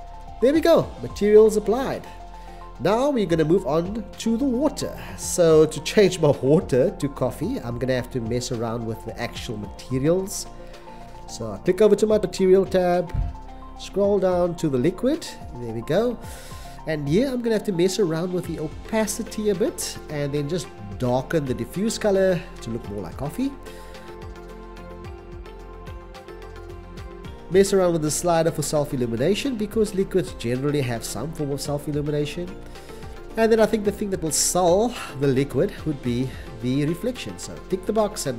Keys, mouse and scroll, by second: 4.7 x, 5.8 c, 8.4 x, 36.2 c, 36.7 c.